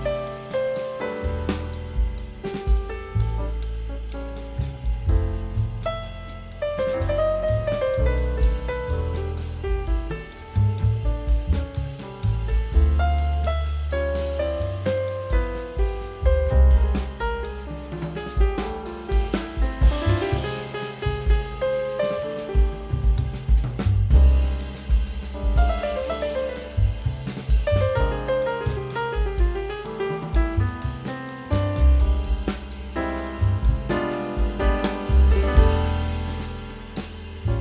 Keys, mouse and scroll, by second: 0.0 scroll down 1, 3.6 scroll down 1, 5.4 scroll up 1, 7.3 shift+click, 7.6 c, 10.3 scroll down 1, 11.3 scroll up 1, 11.9 scroll down 1, 12.3 scroll up 1, 18.0 scroll down 1, 19.6 scroll down 1, 20.1 scroll up 1, 22.9 F12, 27.1 2, 27.2 Tab, 29.0 scroll down 1, 29.6 2, 29.9 scroll up 1, 30.6 2, 32.3 scroll down 1, 32.8 scroll up 1, 33.7 2, 34.9 scroll down 1, 35.3 scroll up 1, 36.0 2.